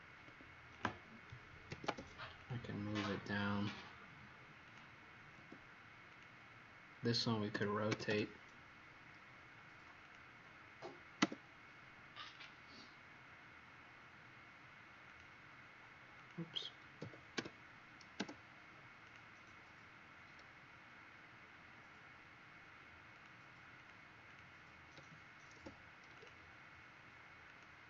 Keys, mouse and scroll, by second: 0.2 Escape, 1.7 m, 2.3 click, 6.0 click, 7.6-8.3 typing, 10.0 click, 12.4 click, 17.0-17.8 typing, 18.9 click, 23.7 click, 24.3 click, 24.9 m, 26.2 click, 27.5 click.